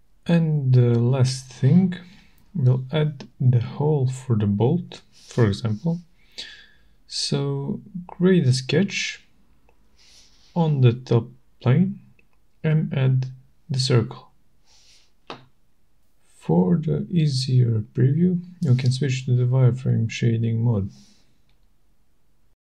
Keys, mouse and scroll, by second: 0.3 middle click, 1.5 scroll, 1.9 shift+right click, 8.7 click, 9.7 click, 11.1 shift+right click, 13.6 click, 15.1 click, 15.4 right click, 16.1 click, 18.5 click, 20.9 click.